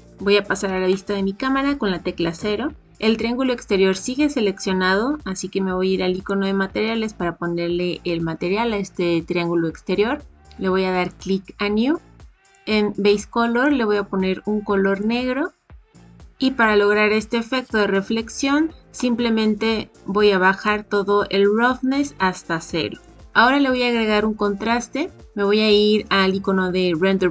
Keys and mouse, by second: 2.3 KP_0, 6.1 click, 11.0 click, 12.4 click, 20.7-23.1 drag.